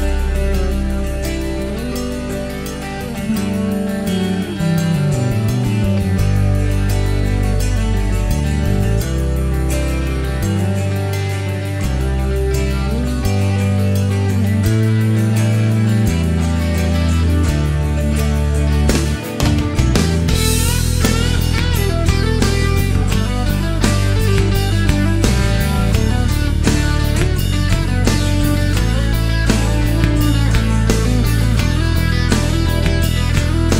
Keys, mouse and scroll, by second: 0.9 click, 2.2 click, 3.5 c, 4.9 scroll down 1, 5.6-7.1 middle drag, 16.7 click, 17.6-18.0 scroll down 1, 18.0-18.9 middle drag, 18.9-19.3 scroll up 1, 21.3-22.6 middle drag, 25.8 click, 26.7-27.1 scroll down 1, 27.1-28.1 middle drag, 29.1 shift+right click, 31.3 click, 32.3 click, 33.0-33.7 middle drag.